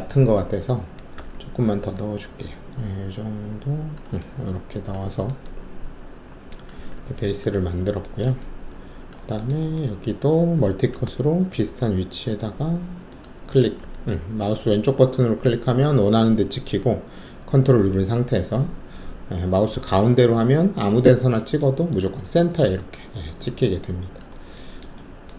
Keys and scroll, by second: 1.1 w, 6.9 alt+`, 10.9 alt+s.